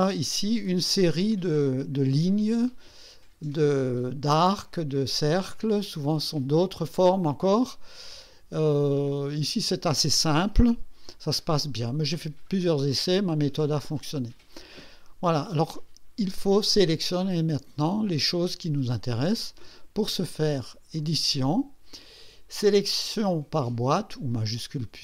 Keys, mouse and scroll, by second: 1.2-1.6 scroll up 2, 2.4 scroll down 2, 5.1 scroll down 2, 21.0 click.